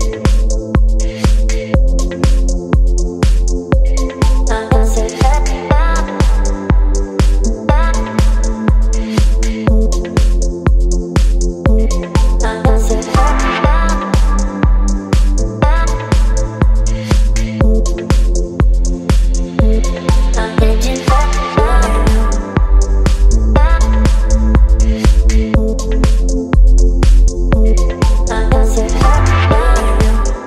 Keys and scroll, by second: 1.9 Return, 4.6 space, 13.1 v, 20.1 ctrl+t, 27.8 Return, 29.6 ctrl+j.